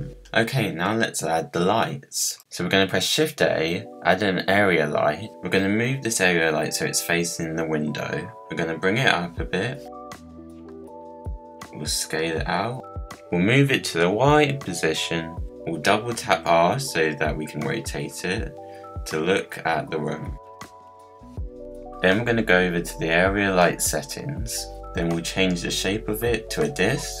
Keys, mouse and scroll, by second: 0.0 click, 0.8 scroll down 1, 0.9-3.8 middle drag, 3.8 shift+a, 5.3-6.7 drag, 7.6-9.0 middle drag, 9.0 click, 10.2 middle click, 10.7-11.1 scroll down 1, 11.1 middle click, 11.8 s, 14.1-15.7 drag, 16.2 r, 20.0 middle click, 20.6 scroll down 1, 20.7 scroll up 2, 20.8-21.4 scroll down 1, 21.4 g, 22.0 middle click, 22.4-22.8 scroll down 1, 22.8-27.2 drag.